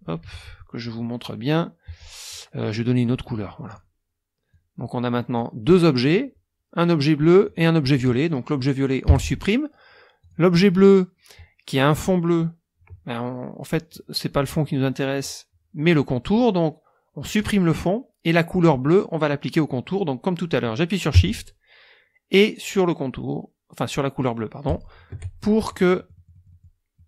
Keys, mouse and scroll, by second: 0.5 KP_Subtract, 0.9 click, 3.7 click, 4.5-5.5 drag, 6.0 click, 7.5 click, 9.1 Delete, 10.2 click, 17.4 click, 24.7 shift+click, 25.6 shift+click, 26.9 click.